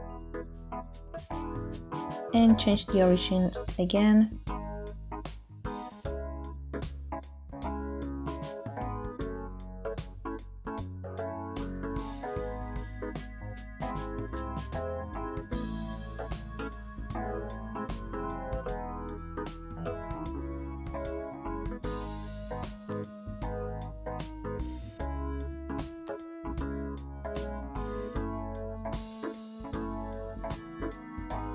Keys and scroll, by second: 1.2 ctrl+j, 6.8 Escape, 15.2 shift+space, 22.0 shift+space, 24.2 shift+space.